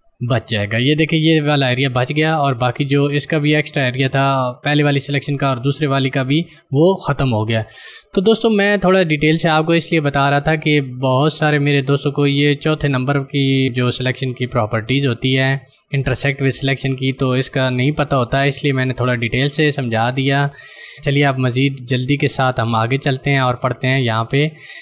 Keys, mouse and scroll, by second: 23.9 click.